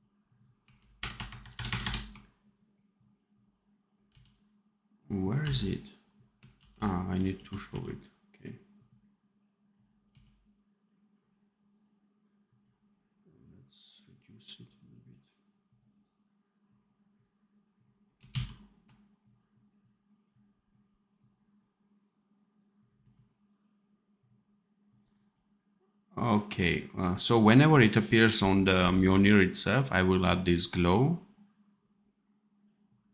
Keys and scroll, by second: 0.9 shift+KP_Add, 1.6 shift+KP_Add, 4.0 x, 5.3 v, 6.5 ctrl+z, 7.2 f, 7.6 r, 10.0 x, 18.2 ctrl+z.